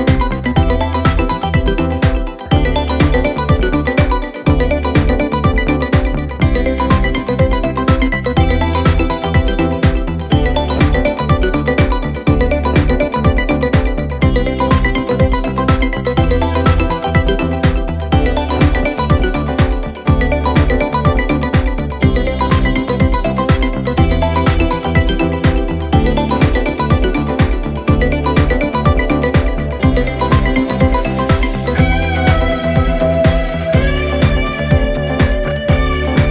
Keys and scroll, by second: 8.8 space, 10.0 space, 18.9 space, 23.0 space, 35.4 3, 35.8 Return.